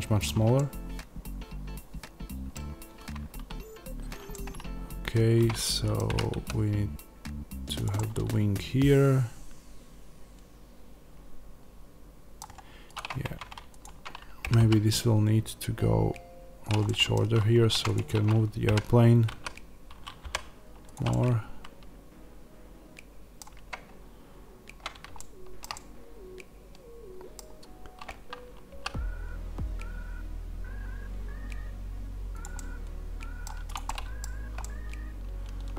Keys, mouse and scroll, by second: 6.0 g, 7.7 click, 7.8-12.8 middle drag, 12.8 click, 13.1 Tab, 13.7 click, 14.4 g, 16.8 middle click, 17.6 Tab, 17.7 click, 18.6 g, 20.8 click, 21.0-32.3 middle drag, 24.3 scroll up 1, 28.6 s, 32.3 click, 32.4-33.5 middle drag, 33.5 click, 33.7-35.7 middle drag, 34.1-34.5 scroll down 1.